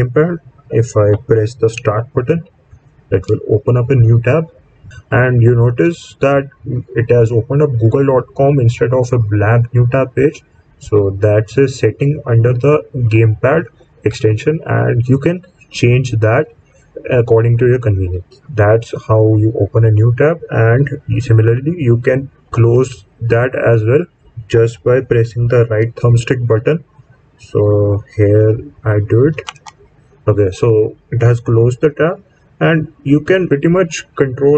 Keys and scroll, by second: 3.0 Menu.